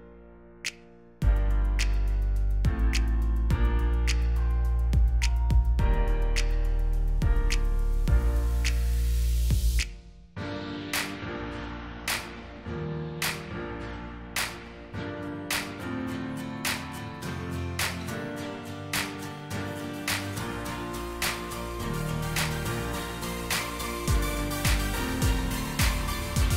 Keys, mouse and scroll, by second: 2.3-7.8 typing, 15.7 typing, 17.5 typing, 24.9 shift+click.